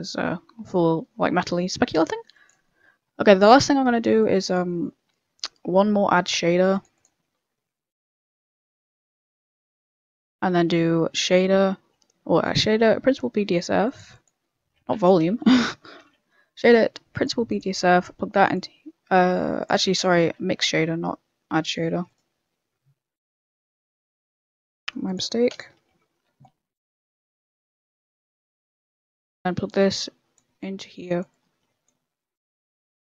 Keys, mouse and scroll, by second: 2.6 middle click, 3.1 middle click, 4.2 middle click, 4.2 click, 4.8 shift+a, 9.4 middle click, 9.4 middle click, 9.9 click, 10.3 shift+a, 15.3 Delete, 15.9 shift+a, 17.9 click, 19.6 click, 20.7 shift+a, 23.4 middle click, 24.4 click, 25.1 click, 25.9 ctrl+Delete, 26.7 click, 27.4 click.